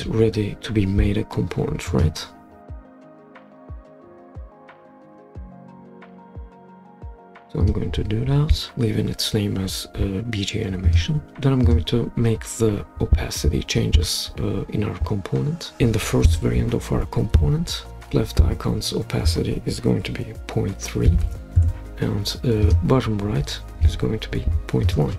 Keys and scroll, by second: 21.0-21.7 typing.